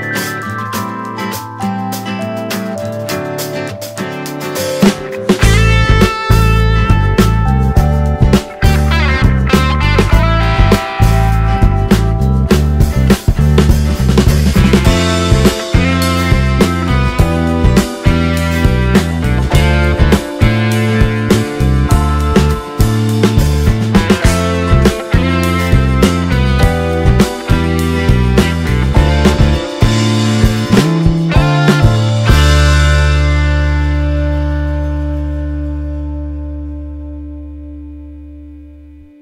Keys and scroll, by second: 34.9 space, 38.5 ctrl+space.